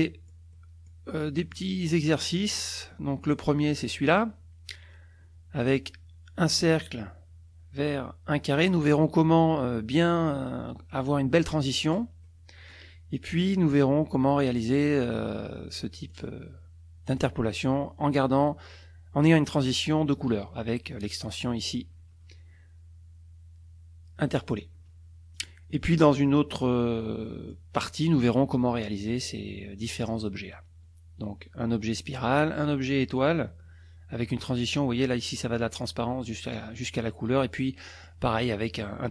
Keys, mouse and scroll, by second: 0.5 click, 1.4 click, 3.7 click, 12.2 click, 15.0 click, 16.1 click, 17.1 click, 21.6 click, 25.3 click, 25.7 click, 26.4 click, 27.2 click, 37.6 click.